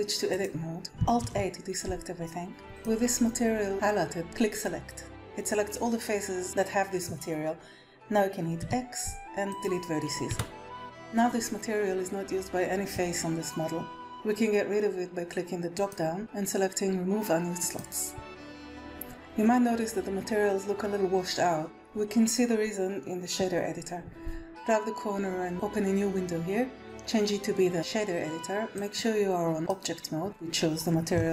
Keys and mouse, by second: 1.2 alt+a, 2.6 click, 4.5 click, 8.6 x, 10.3 Tab, 15.8-17.8 drag, 24.5-25.5 drag, 26.8-27.7 drag, 28.7-29.6 drag.